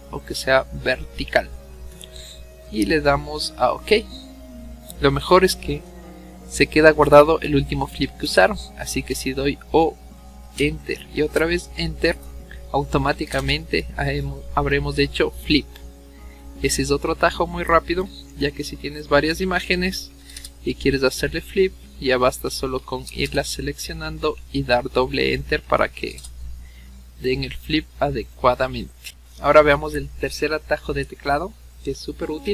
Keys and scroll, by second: 9.7 o, 10.4 Return, 11.3 Return, 13.0 o, 13.2 Return, 13.4 Return, 18.3 v, 20.0 o, 20.2 Return, 20.4 Return, 21.9-23.1 typing, 23.1 Return, 23.3 Return, 24.2 v, 25.5-26.7 typing, 27.7 v.